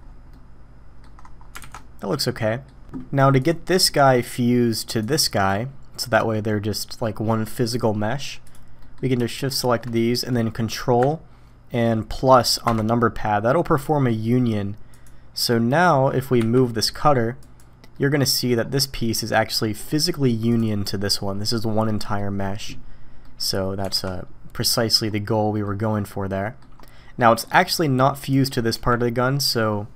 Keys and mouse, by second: 0.3-1.0 middle drag, 1.6 alt+a, 1.7-2.7 middle drag, 3.4 middle click, 3.8 middle click, 5.0 click, 5.4-5.9 drag, 5.9 middle drag, 8.5 click, 8.8 middle click, 13.4-14.1 drag, 14.9 click, 16.4 m, 17.9-18.5 drag, 19.0 drag, 19.8 click, 22.0 click, 23.2 drag, 23.9 alt+a, 24.1-24.8 drag, 24.8 middle click, 25.6 drag, 25.8-26.6 middle drag, 27.2 click, 28.7 g.